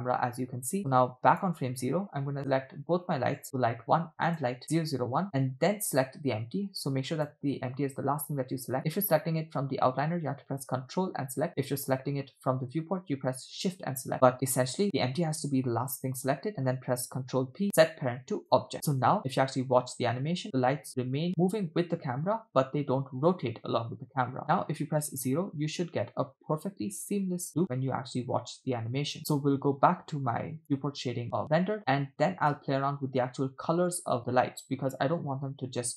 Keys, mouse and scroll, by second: 0.5 space, 0.8 click, 3.4-4.0 drag, 4.3 shift+click, 7.1 ctrl+click, 11.6-12.3 middle drag, 14.1 middle click, 14.8-16.3 middle drag, 17.4 ctrl+p, 19.1 space, 24.4 space, 24.6 KP_0, 25.1 space, 29.2 space, 30.6 click, 31.8 space, 32.6 space, 33.4 space, 34.3 space, 35.9 scroll down 2.